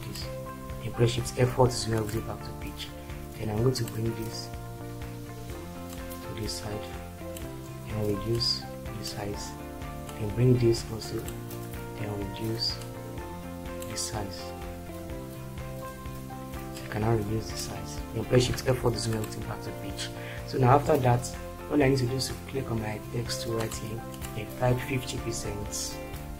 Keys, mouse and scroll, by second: 1.2 shift+F4, 18.7 shift+F4.